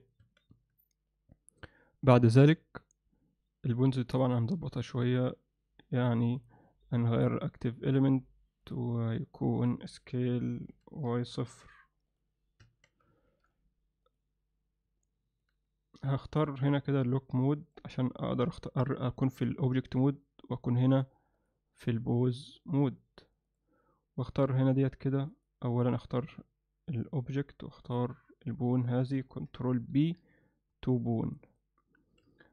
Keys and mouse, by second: 0.3 Tab, 0.5 Tab, 4.7 Tab, 6.3 click, 7.2-8.0 drag, 8.7 click, 10.7 s, 12.7 Tab, 13.2 alt+shift+middle drag, 15.1 middle click, 16.7-17.8 drag, 19.2 alt+shift+middle drag, 19.8 ctrl+alt+middle click, 21.4 click, 22.4-23.7 drag, 24.4 click, 27.8 shift+click, 30.0 ctrl+p, 32.4 shift+middle click.